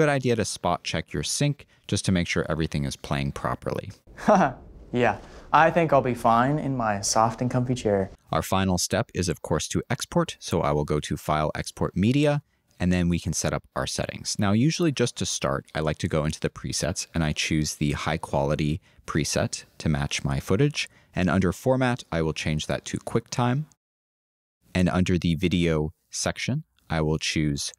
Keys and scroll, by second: 16.7-17.6 typing.